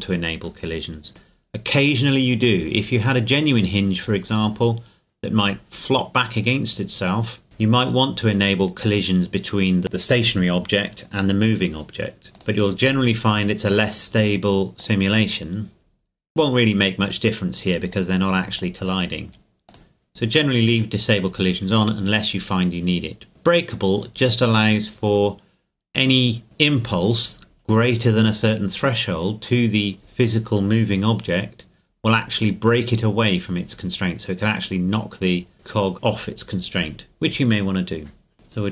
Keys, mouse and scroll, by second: 0.6 right click, 0.8 middle click, 1.4 scroll down 1, 7.4-8.6 scroll up 1, 8.6 right click, 12.2 right click, 12.3 click, 12.8-14.8 scroll down 1, 14.8 click, 17.9 click, 18.0 click, 23.3-24.3 scroll up 1, 38.3 right click.